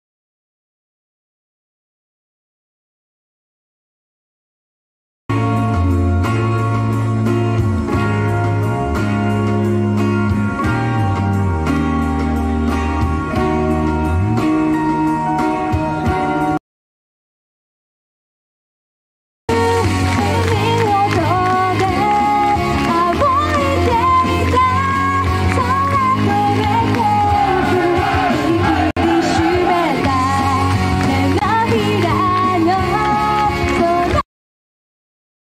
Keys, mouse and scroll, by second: 1.2 click, 16.5 click, 19.0 typing.